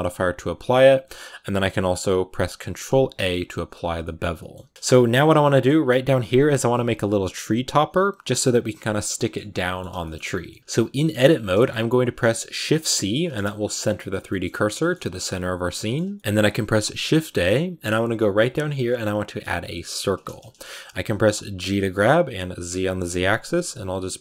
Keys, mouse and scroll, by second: 0.9-3.0 drag, 3.0 ctrl+a, 3.8 scroll down 2, 3.9 middle click, 4.4-5.3 scroll up 5, 4.5 Tab, 4.7 shift+middle click, 5.3 middle click, 5.7 a, 6.4-6.7 scroll down 2, 8.9-10.3 scroll down 4, 9.0 middle click, 9.5 middle click, 9.9 shift+middle click, 10.3 middle click, 10.6 scroll up 1, 10.6 a, 10.9 middle click, 11.2 scroll down 3, 11.4-12.4 middle drag, 12.4 shift+c, 13.1 scroll up 1, 13.2-14.3 middle drag, 14.3-14.6 scroll up 4, 14.6 shift+middle click, 15.0-15.6 scroll up 3, 15.6-19.9 middle drag, 21.9 g.